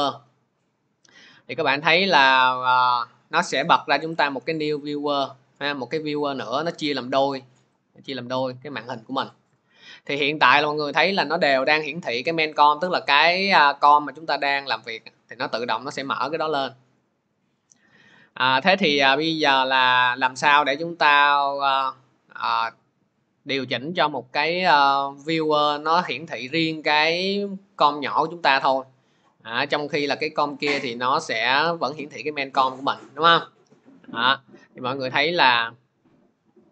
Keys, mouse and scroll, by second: 4.0 click, 7.6 click, 7.8 scroll, 8.6 scroll, 12.9 click, 13.7 click, 21.7 click, 27.4 click, 33.6 click, 34.4 click.